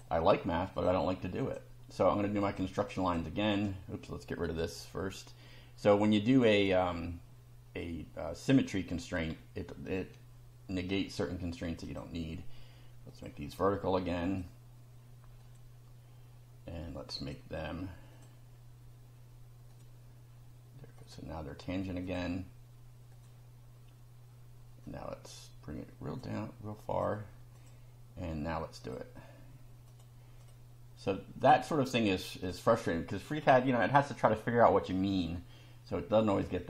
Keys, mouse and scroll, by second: 0.8 click, 1.4 click, 2.4 click, 3.0 click, 3.6 right click, 4.5 click, 9.9 Delete, 11.9 click, 13.1 click, 14.3 click, 15.4 click, 17.2 click, 18.1 click, 19.7 click, 21.0 click, 22.1 click, 23.1 click, 24.9-26.4 drag, 26.9 click, 27.5 click, 28.8 click, 29.9 click, 30.4 click, 31.4 click, 32.4 click, 35.1 click.